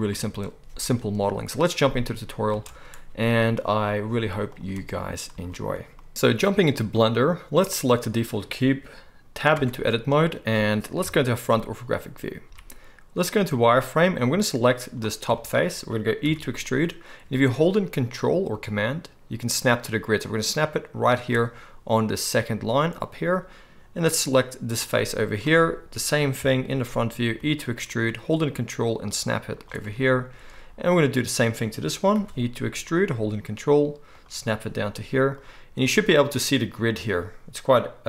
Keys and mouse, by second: 0.1 space, 2.5 space, 4.2 z, 5.0-6.1 right drag, 5.3 space, 6.1-8.0 drag, 8.0-14.1 middle drag, 9.5 Tab, 11.0 KP_1, 12.4 z, 14.1-21.2 drag, 16.2 e, 21.2-24.2 ctrl+middle drag, 24.2-29.6 drag, 26.4 KP_1, 27.4 e, 29.6 ctrl+shift+middle click, 30.5-34.2 drag, 32.1 e, 34.2-35.4 ctrl+middle drag, 35.4-38.0 drag.